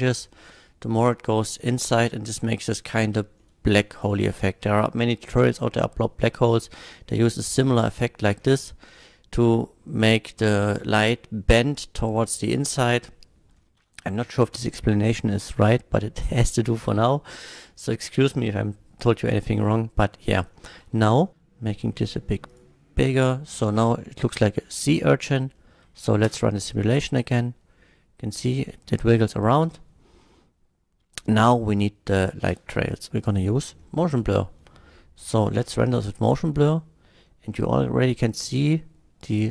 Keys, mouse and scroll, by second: 3.4 middle click, 3.9 click, 6.8-8.0 drag, 13.1 middle drag, 17.5 scroll up 2, 20.6-21.3 middle drag, 21.3 s, 22.5 click, 23.2 click, 24.0 middle drag, 24.8-25.2 middle drag, 25.3 scroll down 1, 25.6 middle click, 26.3 space, 32.5 space, 33.2 click, 33.8 KP_0, 35.5 F12, 37.5 middle click.